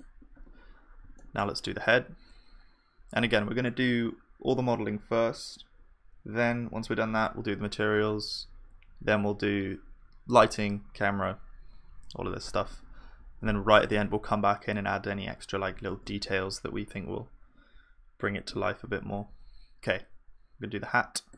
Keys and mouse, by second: 13.3-15.2 drag, 15.9 shift+a.